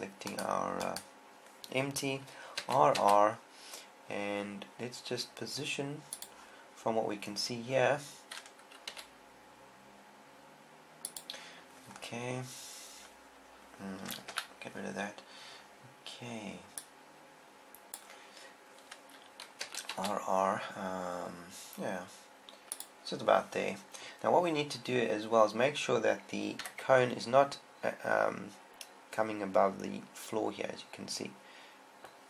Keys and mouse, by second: 3.1 r, 7.1-8.5 drag, 9.4 r, 9.5 r, 11.7 click, 14.7 n, 17.8 click, 18.4 click, 20.1 r, 23.3 click, 27.0 KP_1.